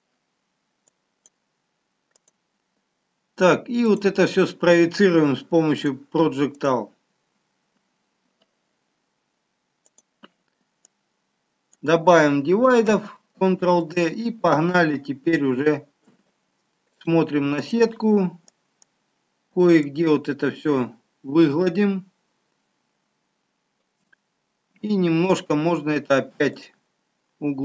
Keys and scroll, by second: 13.2 ctrl+d.